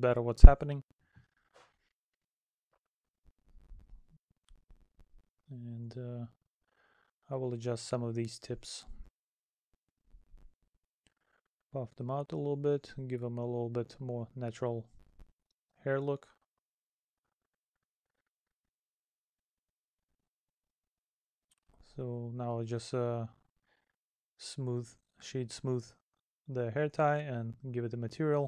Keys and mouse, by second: 1.4 middle click, 6.4 middle click, 8.6 middle click, 10.2 middle click, 11.5 middle click, 12.2 middle click, 13.2 middle click, 14.3 middle click, 15.0 middle click, 15.9 middle click, 17.5 middle click, 19.4 middle click, 20.5 middle click, 21.2 right click, 23.2 right click, 24.9 middle click.